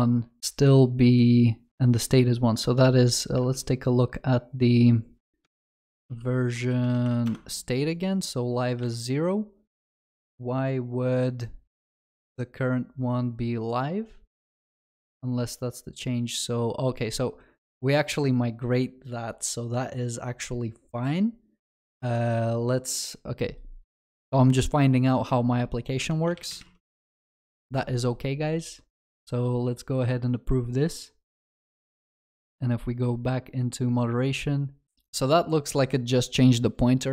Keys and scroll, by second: 5.6 ctrl+shift+n.